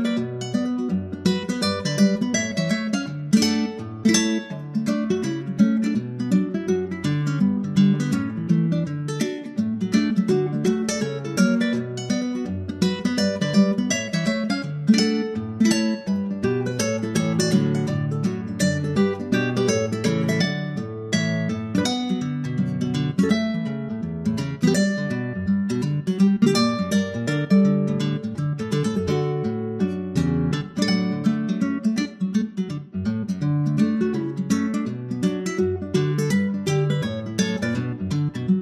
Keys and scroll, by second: 5.1 super+Tab, 5.5 super+Tab, 5.7 super+Tab, 5.8 super+Tab, 7.3 super+\, 9.1 super+c, 9.3 super+Tab, 10.0 super+v, 14.6 super+Tab, 17.2 super+c, 17.4 super+Tab, 18.4 super+v, 21.8 super+Tab, 31.0 super+c, 31.1 super+Tab, 32.1 super+v.